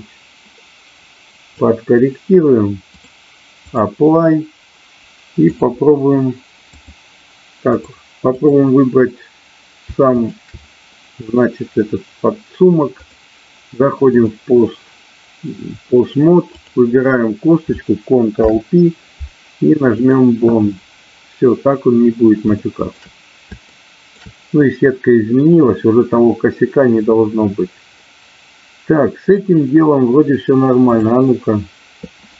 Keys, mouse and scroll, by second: 2.8-3.8 drag, 6.8 click, 8.3 click, 13.1-14.4 drag, 16.4 click, 18.3 ctrl+p, 22.5 shift+middle click, 23.6 shift+middle click, 28.0-29.4 middle drag, 30.8 click.